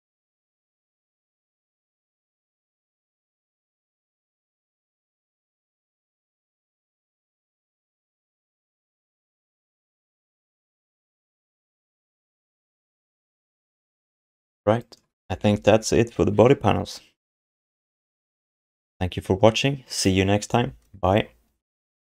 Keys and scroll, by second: 1.3 ctrl+s, 3.7 ctrl+h, 6.5 BackSpace, 7.3 s, 15.3 ctrl+s.